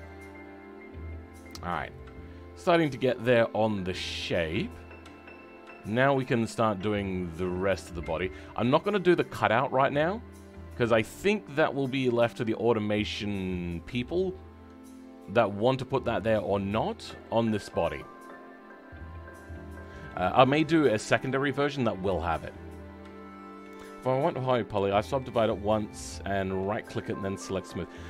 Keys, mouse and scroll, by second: 0.0-1.5 right drag, 0.0 middle click, 1.5-1.9 scroll up 2, 1.9-2.9 right drag, 1.9 middle click, 3.3-4.9 middle drag, 8.0 middle click, 15.4-28.0 middle drag.